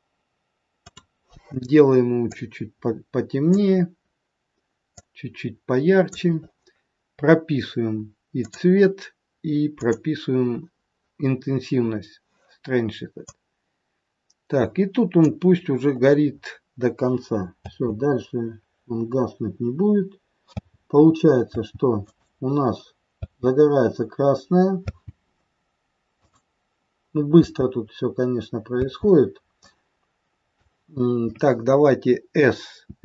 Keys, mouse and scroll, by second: 0.8 click, 4.9 click, 8.4 click, 9.8 click, 13.4 click, 15.5-16.6 scroll down 14, 17.5 space, 18.8-19.2 scroll down 2, 20.5 space, 21.5 space, 22.0 click, 23.1 space, 24.9 space, 26.3 click, 27.5 space, 28.9 space, 29.6 click, 32.8 s.